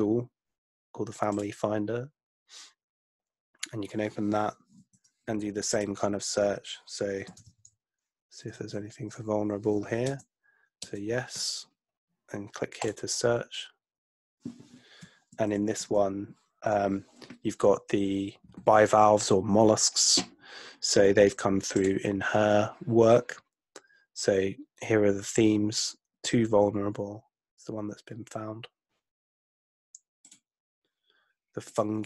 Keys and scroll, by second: 4.8 super+F2, 7.2-9.2 typing, 10.1 Return, 10.8 Return.